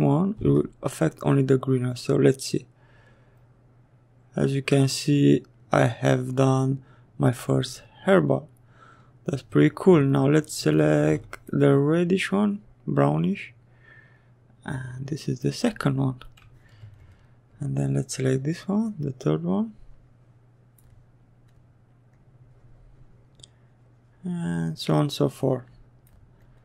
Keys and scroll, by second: 0.5 s, 10.6 s.